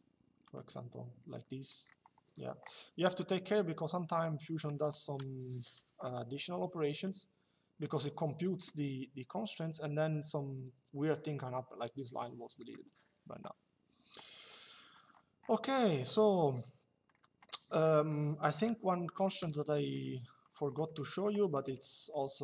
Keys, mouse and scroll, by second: 0.2 click, 6.6 click, 15.8 click, 17.6 middle click, 18.3 Delete, 18.6 middle click, 19.1 click, 20.3 Escape, 20.7 middle click, 21.3 click.